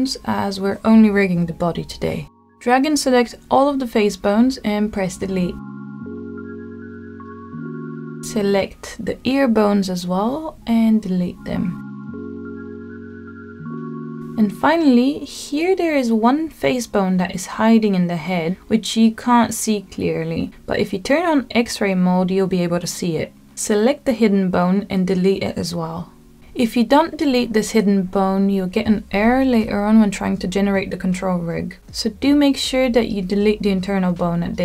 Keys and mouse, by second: 1.5-2.8 drag, 3.2 click, 5.4 Delete, 8.1-9.1 middle drag, 9.6-10.7 drag, 11.7-12.9 shift+drag, 13.6 Delete, 15.8-16.2 middle drag, 17.7 click, 19.1 middle click, 20.6-23.3 drag, 24.5 middle click, 25.1 click, 25.9 click, 27.6 middle click, 29.0 Delete, 31.7 click, 33.2 middle click, 34.2 middle click.